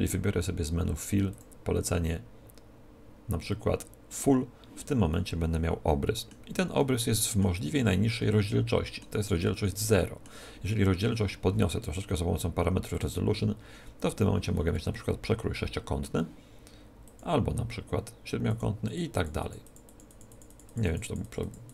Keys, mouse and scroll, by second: 1.3-3.0 drag, 5.1-11.2 middle drag, 12.9-14.7 drag, 14.7-16.4 middle drag, 17.0-21.7 drag.